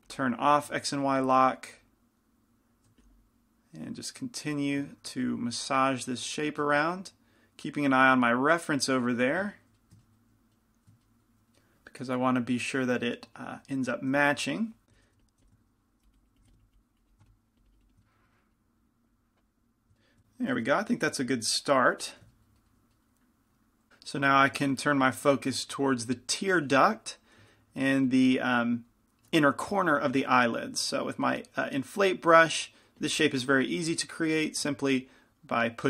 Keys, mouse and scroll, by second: 1.0 click, 1.3 f, 3.2-7.0 drag, 3.2 f, 5.3 f, 9.0 click, 9.4 f, 15.0 i, 15.0 f, 15.3 f, 15.5 f, 16.0-18.8 drag, 16.5 f, 18.1-20.5 middle drag, 22.3 click, 27.7 f, 29.5 f, 32.6 shift+f, 33.6 f, 34.6 f, 35.3-35.8 drag.